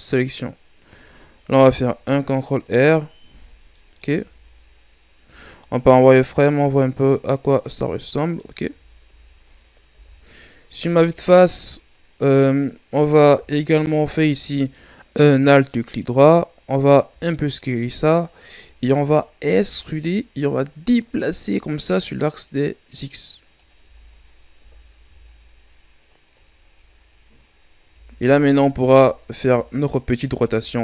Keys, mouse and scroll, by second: 1.5 ctrl+r, 3.5 scroll down 1, 3.7 middle click, 4.2 a, 4.6-5.0 scroll up 1, 5.3 z, 5.9 middle click, 6.6 z, 7.1-8.7 middle drag, 8.7 a, 9.0 a, 9.9 KP_1, 10.7 a, 12.3 scroll down 1, 12.5-13.7 middle drag, 13.7 alt+right click, 14.2 scroll down 2, 14.5-17.1 middle drag, 17.1 s, 18.6 middle click, 19.0-19.5 scroll up 2, 19.5 e, 20.9-23.8 drag, 23.8 Tab, 24.6 KP_1, 25.0 a, 25.7-26.3 scroll down 4, 26.4-27.4 shift+scroll up 2, 27.5-27.9 scroll up 4, 27.9 Tab, 28.5 ctrl+scroll up 2, 28.7 a, 29.1 scroll down 3, 29.3 a, 30.4 r.